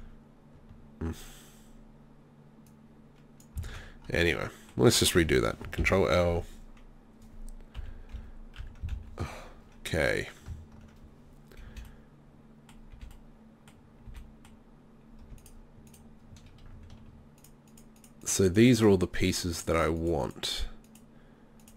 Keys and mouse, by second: 2.7 click, 3.7 ctrl+z, 5.8 ctrl+l, 7.8 KP_3, 8.1 KP_1, 8.6 KP_3, 8.9 ctrl+KP_1, 11.7 b, 12.9 b, 14.1 b, 20.5 shift+right click.